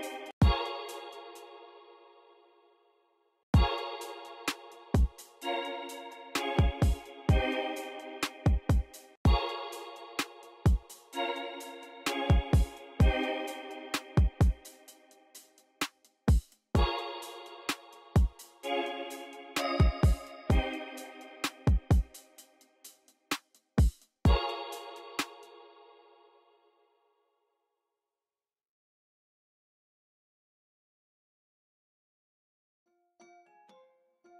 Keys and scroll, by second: 0.1 space, 0.8 space, 1.1 super+f, 3.3 space, 6.6 alt+r, 8.8 alt+r, 9.0 space, 13.0 alt+super+s, 13.8 x, 24.5 x, 25.0 space, 29.6 v.